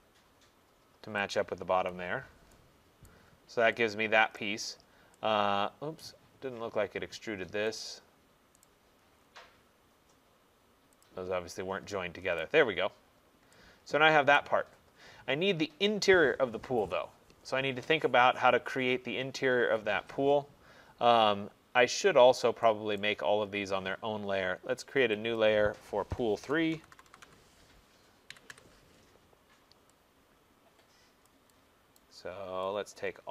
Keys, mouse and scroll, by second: 1.4 click, 1.8 Escape, 2.3 middle click, 2.8 middle click, 3.1 right click, 3.4 middle click, 3.5 middle click, 4.4 middle click, 4.4 right click, 4.9 middle click, 6.0 middle click, 6.0 right click, 6.7 middle click, 6.8 middle click, 6.9 middle click, 7.1 middle click, 7.9 click, 8.7 right click, 9.2 middle click, 11.1 middle click, 11.1 click, 11.6 middle click, 11.7 middle click, 12.3 middle click, 12.5 right click, 13.2 middle click, 14.3 middle click, 14.4 right click, 14.7 middle click, 16.6 middle click, 22.3 middle click, 22.3 middle click, 23.1 middle click, 23.1 right click, 25.4 click, 26.8-28.9 typing, 31.3 click, 32.1 right click.